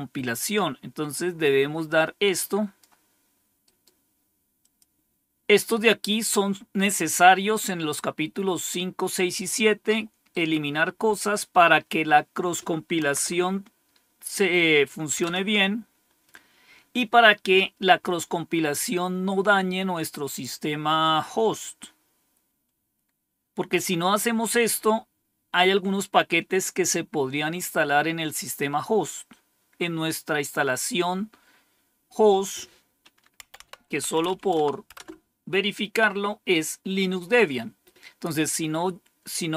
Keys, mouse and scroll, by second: 1.0-2.7 drag, 3.5 right click, 4.5 click, 10.2 right click, 11.6 click, 12.9 Right, 15.1 Return, 22.5-28.3 scroll down 1, 33.1-34.7 typing, 34.8 Return.